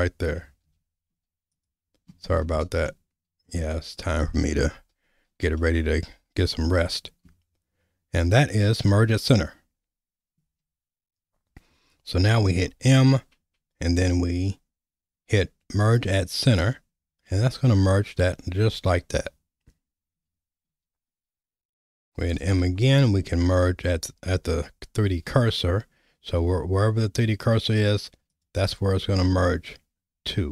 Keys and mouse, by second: 0.7 z, 2.9 middle click, 5.6-6.6 middle drag, 10.6 ctrl+z, 12.4 m, 20.7 ctrl+z, 22.4 m.